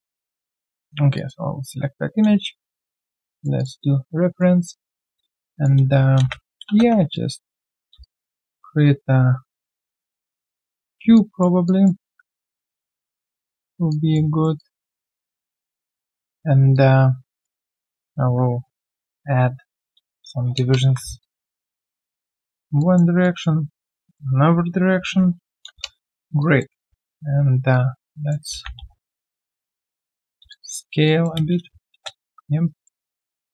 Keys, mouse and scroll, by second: 1.6 ctrl+a, 3.6 double click, 4.3 alt+right click, 6.2 space, 6.6 space, 7.1 alt+click, 7.5 alt+right click, 8.0 shift+right click, 11.1 alt+click, 12.0 r, 13.9 alt+click, 14.2 alt+right click, 14.6 alt+click, 16.0 alt+q, 16.0 click, 19.5 ctrl+alt+q, 21.0 Return, 21.2 alt+click, 21.6 alt+right click, 22.8 alt+click, 23.9 alt+click, 24.9 ctrl+alt+q, 25.6 Return, 26.4 alt+click, 26.7 typing, 28.9 right click, 29.2 typing, 30.5 alt+click, 31.4 space, 31.9 space, 32.3 f, 32.6 alt+right click, 32.8 alt+middle click, 33.2 alt+right click.